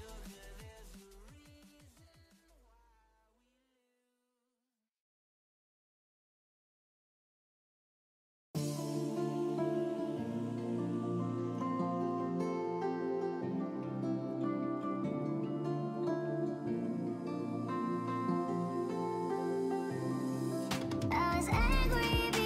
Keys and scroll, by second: 0.0-1.6 typing, 2.9-3.6 typing, 16.9 ctrl+c, 17.1 End, 17.4 Return, 17.7 ctrl+v, 18.2 Up, 19.2-19.6 typing, 20.0 Down, 20.4 Right, 20.7-21.2 Right, 21.4 Left, 21.6 Left, 21.8-22.4 Left.